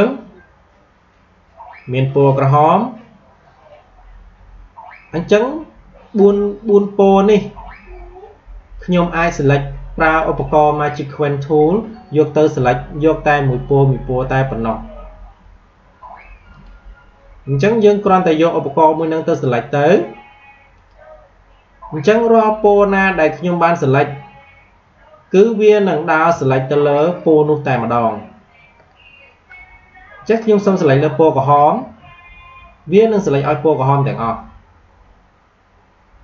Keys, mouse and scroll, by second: 8.7 click, 16.5 click, 20.7 click, 33.9 click.